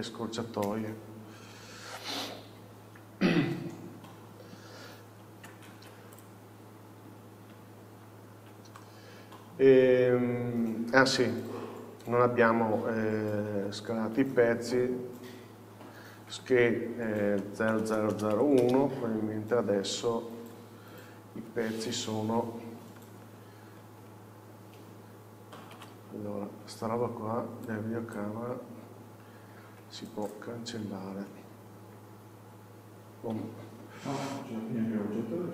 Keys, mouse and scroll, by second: 0.2 click, 1.4 n, 2.0-2.7 scroll down 1, 2.7 KP_7, 3.9 KP_1, 5.9 alt+a, 6.2-8.9 drag, 7.9 shift+h, 8.9-13.6 middle drag, 9.6-11.6 scroll up 1, 11.6-13.6 scroll down 1, 13.6 alt+h, 16.4 s, 18.8 Return, 20.5 n, 21.0-21.9 scroll up 1, 21.9 KP_7, 22.4-23.8 scroll up 1, 23.8-25.8 scroll down 1, 25.8 alt+a, 26.7-27.8 scroll up 1, 27.8-35.5 drag, 28.8-29.9 scroll up 1, 29.9 x, 30.8-33.4 scroll down 1, 33.4 Home, 34.5-35.5 scroll down 1.